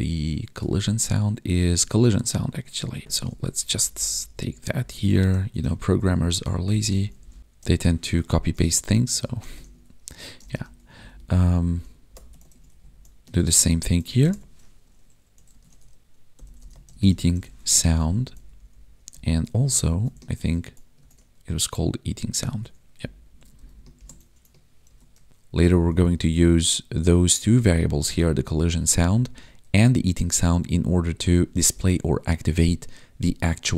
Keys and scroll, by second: 0.1 ctrl+Tab, 1.9 ctrl+Tab, 3.5 ctrl+Left, 4.7 ctrl+shift+Right, 5.3 ctrl+c, 5.6 ctrl+Right, 6.6 Right, 7.0 Left, 7.4 ctrl+v, 7.5 ctrl+b, 8.0 ctrl+s, 8.8 ctrl+Right, 9.5 ctrl+s, 10.9 Up, 12.0 alt+shift+Down, 12.5 ctrl+s, 12.7 Right, 13.3 ctrl+Right, 14.1 ctrl+shift+Left, 17.7 ctrl+s, 18.2 Down, 18.5 Left, 19.0 Up, 19.4 Right, 19.8 ctrl+shift+Left, 20.3 ctrl+c, 20.9 ctrl+Tab, 22.4 ctrl+Tab, 22.9 Down, 23.5 Left, 24.8 ctrl+v, 25.0 ctrl+s, 25.6 Up, 27.5 Left, 29.6 ctrl+shift+Right, 31.3 Down.